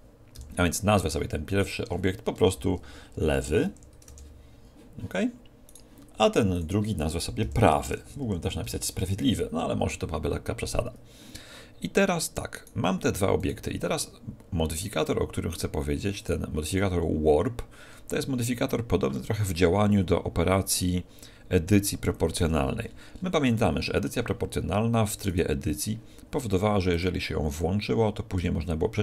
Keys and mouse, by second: 0.3 n, 0.7 middle click, 1.6-3.5 drag, 5.7-7.6 right drag, 6.5-8.5 drag, 12.5-15.4 right drag, 16.2-18.1 right drag, 22.4 Tab, 22.8-25.3 middle drag, 25.3-27.1 right drag, 26.9-28.7 drag, 28.4 g, 28.9 g.